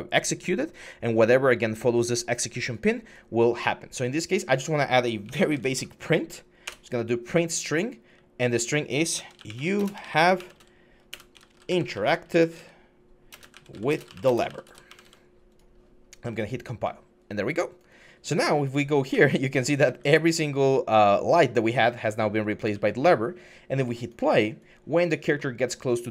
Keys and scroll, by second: 5.0-5.5 typing, 6.4 Return, 9.0-14.8 typing, 18.9-19.6 typing, 22.5 s, 25.4-26.1 typing.